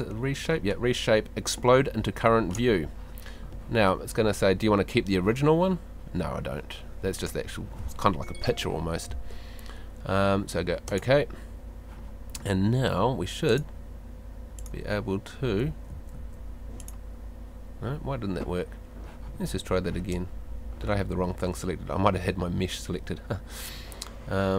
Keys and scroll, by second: 15.7 Escape.